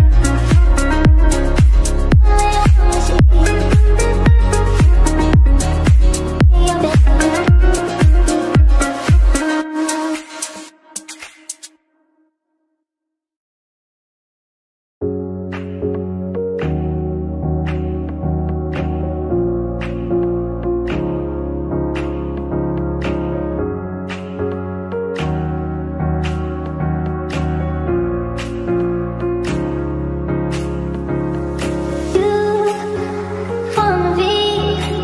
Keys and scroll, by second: 27.9 ctrl+z.